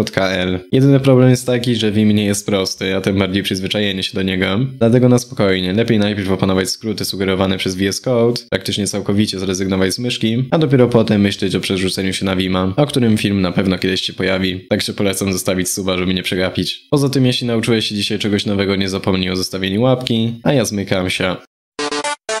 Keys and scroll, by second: 0.2 ctrl+shift+Return, 1.4 ctrl+p, 2.6 ctrl+g, 3.5 ctrl+Right, 3.6 ctrl+Left, 4.2 ctrl+p.